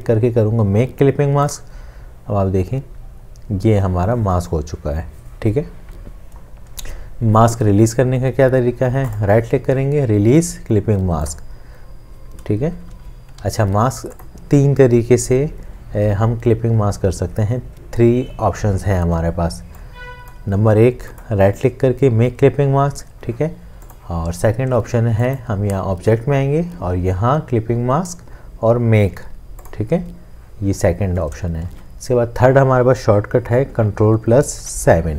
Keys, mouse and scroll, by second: 12.9 ctrl+z, 21.2 right click, 31.7 ctrl+z, 34.6 ctrl+7.